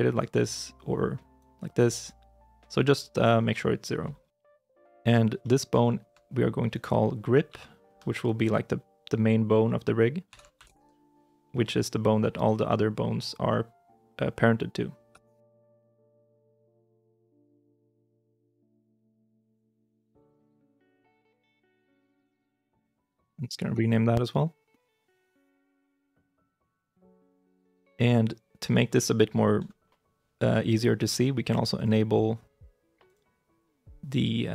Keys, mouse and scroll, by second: 0.4 middle click, 4.2 o, 5.5 middle click, 5.7 shift+i, 6.6 right click, 7.3 F2, 10.1 shift+g, 10.4 r, 10.5 i, 10.7 p, 15.0 Return, 19.7 double click, 20.6-22.9 typing, 23.6 Return.